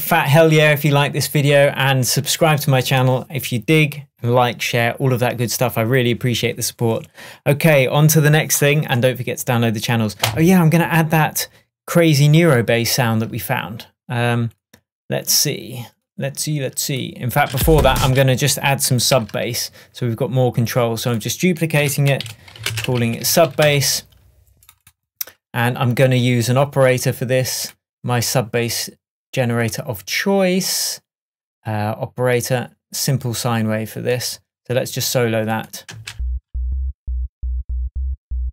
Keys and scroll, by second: 17.6 space, 19.0 super+space, 19.2 super+d, 21.9 super+r, 22.3 shift+super+s, 22.8 space, 23.1 shift+b, 23.7 Return, 36.0 space.